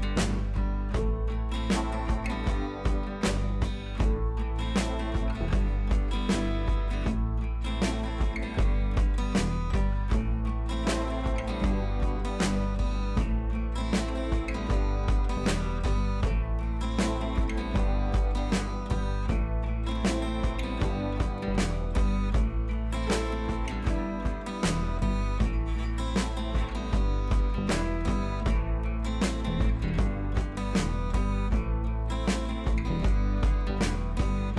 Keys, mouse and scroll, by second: 0.8 click, 3.6 click, 4.3-4.6 scroll down 1, 4.8 scroll up 1, 6.5 click, 8.6 click, 9.5 scroll up 1, 9.7 click, 10.9-11.3 click, 11.6 click, 14.9 click, 17.9 ctrl+c, 18.1 click, 18.9 ctrl+v, 20.3 click, 22.9-25.4 drag, 25.4-25.9 shift+drag, 30.0 click, 31.2 click, 32.0 ctrl+v, 32.8 click.